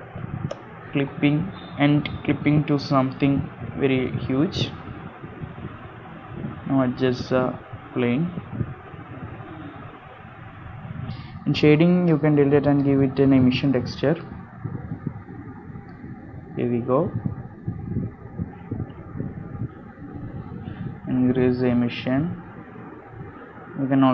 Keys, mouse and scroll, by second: 3.4 scroll down 1, 3.8 shift+middle click, 4.4 click, 4.9-5.3 scroll down 3, 5.2 middle click, 6.5 g, 8.0 middle click, 8.4 r, 11.1 click.